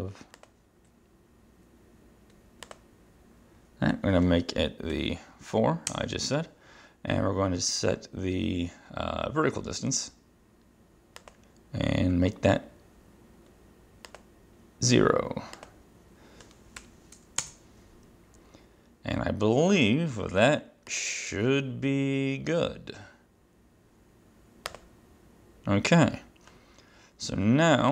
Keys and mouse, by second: 0.5 click, 2.8 click, 5.0 ctrl+4, 6.0 Return, 11.3 click, 14.2 click, 15.6 click, 16.9 ctrl+0, 17.5 Return, 21.0 click, 24.7 click.